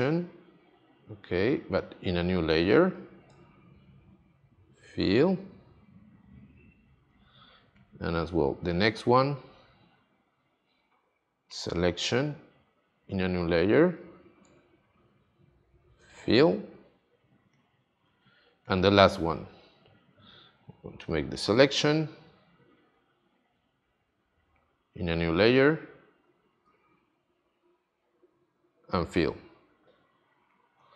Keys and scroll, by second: 4.8 shift+F5, 15.7 shift+F5, 28.3 shift+F5.